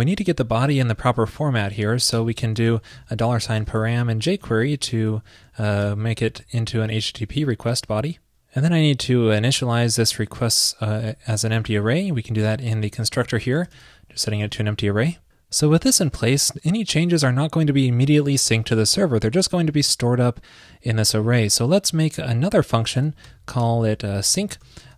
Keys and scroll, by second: 4.5 shift+super+Right, 11.1 super+c, 13.5 super+v, 14.5 super+s.